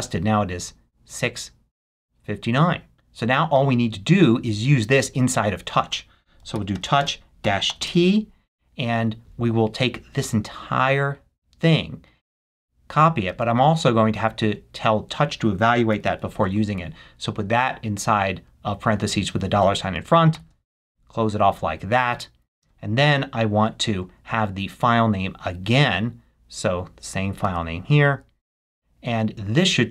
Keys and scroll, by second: 6.1-7.8 typing.